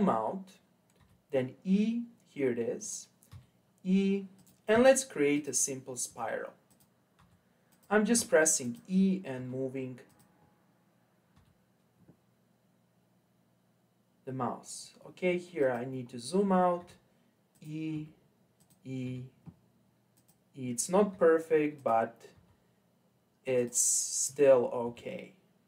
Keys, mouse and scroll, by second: 1.0 e, 3.3 e, 4.7 e, 6.1 e, 7.1 e, 8.1 e, 9.3 e, 11.3 e, 16.1-16.8 scroll down 4, 16.8 e, 17.9 e, 19.0 e, 21.1 e, 22.3 e, 24.8 e.